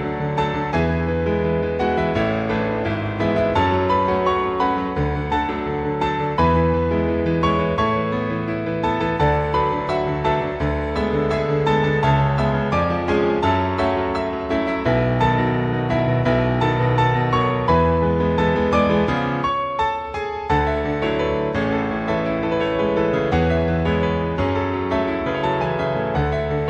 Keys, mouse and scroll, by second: 0.7 click, 4.2 click, 5.6 click, 6.7-7.3 scroll down 1, 7.3-8.0 scroll down 1, 8.0 click, 8.9-10.1 scroll down 3, 10.1-10.5 scroll up 2, 10.8-11.6 scroll up 2, 11.8-12.5 scroll down 1, 13.0-14.1 scroll down 5, 14.1-15.0 scroll up 1, 15.0 click, 17.3-18.0 scroll up 3, 18.5 click, 20.9-22.2 scroll up 1, 23.0 click, 26.5 click.